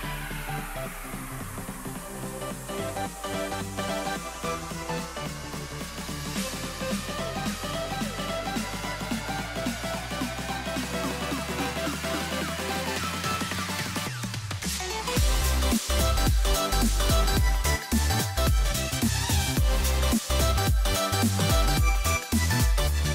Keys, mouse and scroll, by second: 12.5-13.6 middle drag, 14.8-16.1 scroll up 1, 16.1 c, 19.1-20.8 middle drag, 20.8 c.